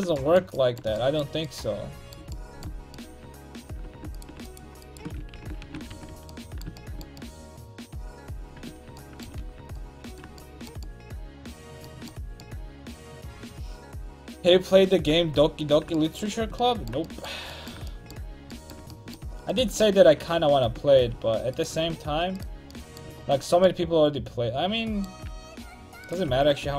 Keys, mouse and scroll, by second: 4.1-5.3 right drag, 5.3 ctrl+x, 5.6 a, 5.9 ctrl+t, 6.1 a, 6.5-7.9 middle drag, 8.6 Tab, 9.4 alt+z, 16.4 Tab, 19.5-23.5 drag, 19.9 ctrl+x, 20.4 ctrl+z, 20.9 a, 21.9 ctrl+x, 26.3 ctrl+x, 26.6 a.